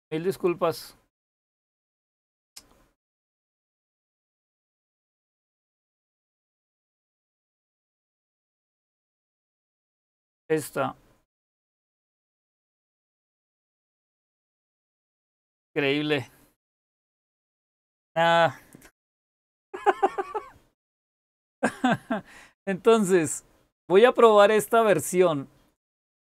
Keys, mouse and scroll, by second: 0.2-1.9 scroll up 1, 1.9-3.0 scroll up 1, 3.0-3.5 scroll up 1, 3.5-6.1 scroll up 1, 6.1-6.8 scroll up 1, 6.8-10.1 scroll up 1, 10.1-10.9 scroll up 1, 10.9-13.6 scroll up 1, 13.6-15.4 scroll up 1, 15.4-19.3 scroll up 1, 19.3-21.1 scroll up 1, 21.1-23.2 scroll up 1, 23.2-23.8 scroll up 1, 23.8-26.3 scroll up 1.